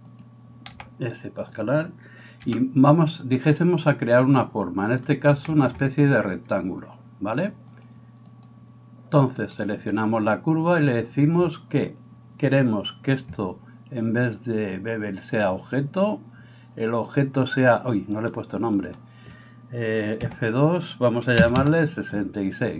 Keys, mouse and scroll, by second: 0.7 s, 2.4 g, 7.8-15.8 drag, 9.5-18.3 right drag, 17.2-22.2 drag, 18.8 right click, 20.2 F2, 21.6 6, 22.2-22.7 middle drag.